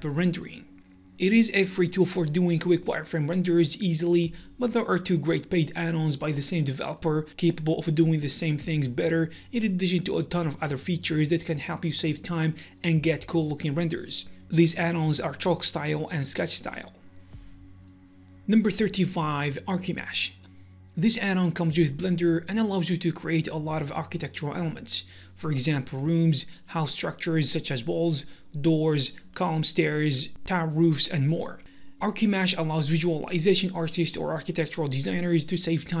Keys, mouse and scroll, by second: 19.9 click, 20.0 scroll, 20.7 right click, 21.0 scroll, 21.6 scroll up 1, 21.8 click, 22.1 middle drag, 22.3 scroll, 22.5-22.8 middle drag, 22.8-23.1 right drag, 23.9 g, 24.7 right click, 25.1 Tab, 25.3 middle click, 26.1 scroll up 1, 26.2-26.9 scroll down 1, 26.9 click, 27.2 middle click, 27.5 r, 28.3-28.6 middle drag, 28.6 right click, 29.1 r, 29.5 KP_Enter, 29.7 g, 30.5 click, 30.7 g, 31.1 click, 31.2-33.1 middle drag, 31.3 scroll up 1, 32.1 g, 33.1 shift+click, 33.2-35.9 middle drag, 33.5 z, 34.2 scroll down 1, 34.6 z.